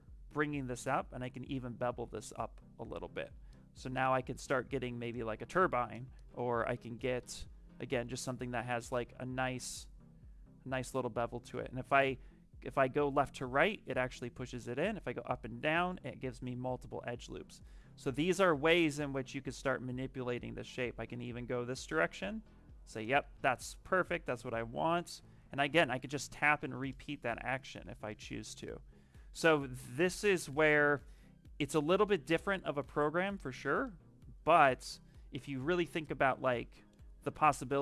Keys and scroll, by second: 6.5 ctrl+z, 27.6 ctrl+z, 29.0 space, 35.5 space.